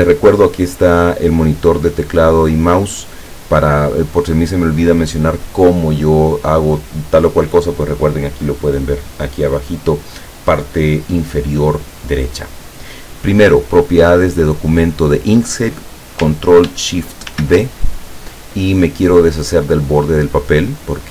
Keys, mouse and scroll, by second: 17.4 ctrl+shift+d, 20.5 click.